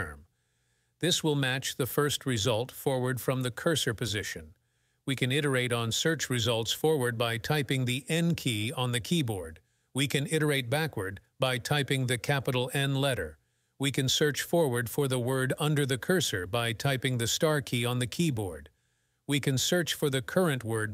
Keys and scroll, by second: 0.0-1.0 typing, 1.5 Return, 3.0 n, 4.6 n, 5.7 n, 6.4 n, 7.5 n, 9.5 shift+n, 10.5 shift+n, 11.4 shift+n, 12.5 shift+n, 14.1 shift+8, 15.3 shift+8, 16.2 shift+8, 16.9 shift+8, 17.6 shift+8, 19.2 shift+3, 20.0 3, 20.5 shift+3.